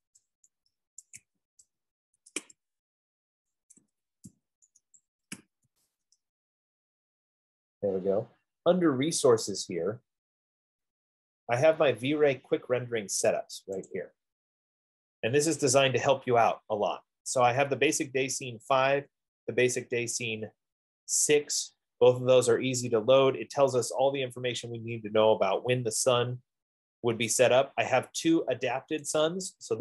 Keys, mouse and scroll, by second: 0.0-2.6 typing, 1.4 click, 3.9-6.1 typing, 11.2 typing, 14.2 click, 15.6-16.1 scroll, 18.8 scroll, 19.4-20.6 scroll, 21.9-22.6 scroll, 23.0-24.0 scroll, 24.9 middle click, 25.0 middle click, 27.1 middle click.